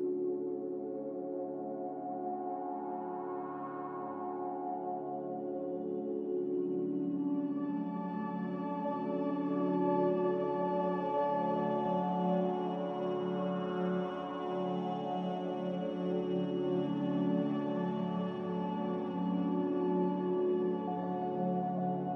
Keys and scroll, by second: 1.1 z, 5.0 typing, 7.4 Return, 14.0 5, 14.4-19.9 Return.